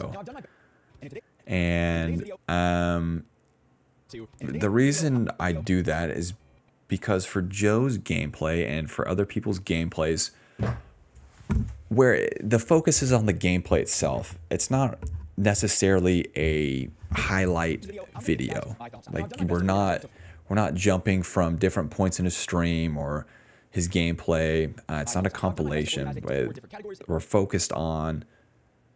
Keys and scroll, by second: 0.4 space, 0.8 space, 1.1 space, 4.8 space, 5.1 space, 8.9-10.0 typing, 17.7 space, 19.8 s, 20.1 space, 21.7 a, 24.3-26.9 typing.